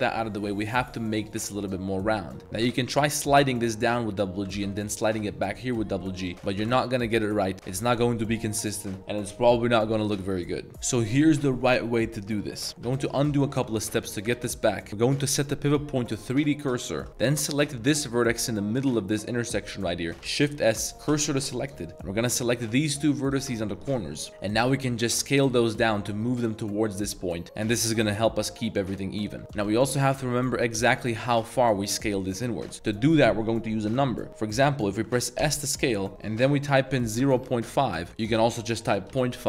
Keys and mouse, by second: 1.2 click, 2.5 g, 2.7 g, 3.1 click, 4.4 g, 4.5 g, 6.2 click, 6.6 g, 6.7 g, 12.9 ctrl+z, 13.2 ctrl+z, 13.4 ctrl+z, 13.9 ctrl+z, 14.4 ctrl+z, 15.1-16.3 drag, 16.8 shift+middle click, 17.5 click, 20.2 shift+s, 22.4 click, 23.2 shift+click, 24.7 s, 27.7 s, 29.4 s, 29.5 s, 35.4 s, 37.2-39.4 typing, 38.0 Return.